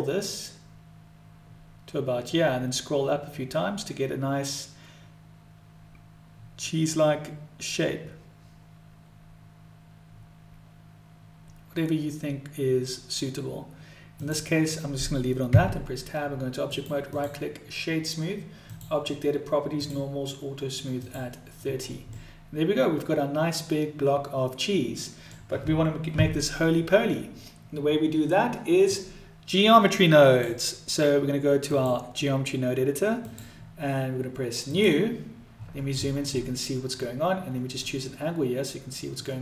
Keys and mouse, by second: 15.5 Tab, 16.8 right click, 18.7 click, 19.8 click, 20.9 click, 22.2-25.4 middle drag, 28.8-30.5 drag, 31.6-33.4 drag, 34.7 click, 37.9-39.2 middle drag.